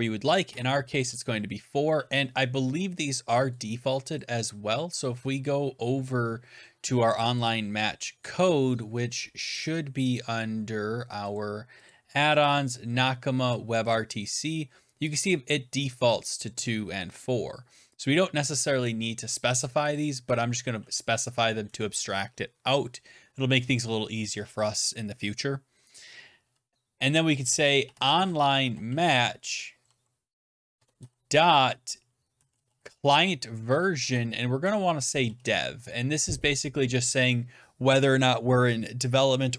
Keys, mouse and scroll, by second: 0.1-0.9 typing, 3.4 click, 3.7 right click, 5.3 scroll, 7.4 click, 8.2 scroll, 8.6 scroll down 7, 9.5 click, 10.4 scroll down 2, 11.2 click, 11.8 click, 12.3 click, 13.7 click, 13.8 click, 16.1 click, 17.9 click, 19.4 click, 20.2 click, 20.2 click, 21.5 Down, 27.5-30.2 typing, 30.6 Tab, 32.0-36.4 typing.